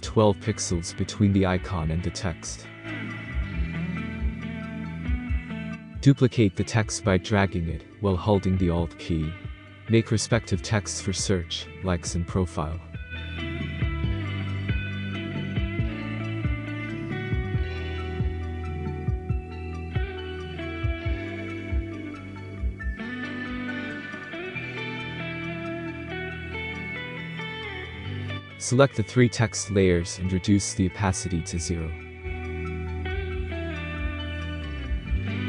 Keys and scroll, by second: 11.4-13.2 typing, 17.6-19.1 typing, 23.0-25.6 typing.